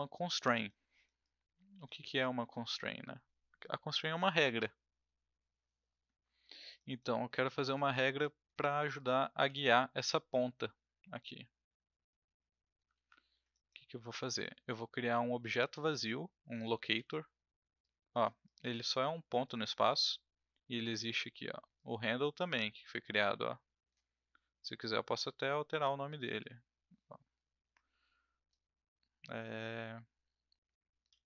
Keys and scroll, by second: 9.4 e, 12.9 ctrl+z, 16.9 w, 30.9-31.2 typing.